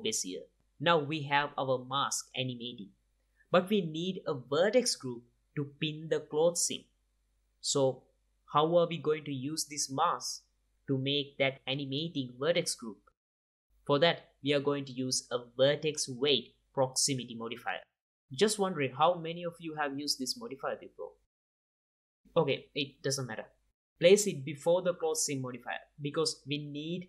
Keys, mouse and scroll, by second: 0.8-3.7 drag, 5.9-7.5 middle drag, 7.5-9.6 drag, 12.7-17.2 drag, 23.4-25.4 drag.